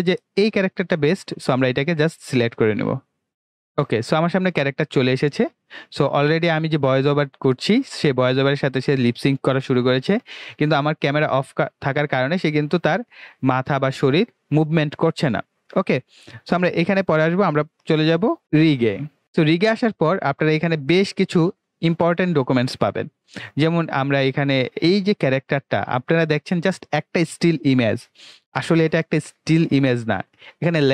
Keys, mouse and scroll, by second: 2.8 click, 19.0 click.